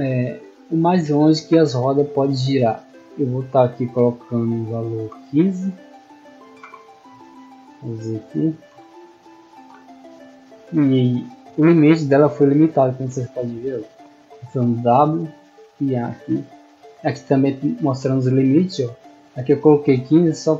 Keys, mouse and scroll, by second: 0.4-2.7 middle drag, 7.2-8.7 scroll up 1, 9.0-13.4 typing, 15.0-17.2 typing.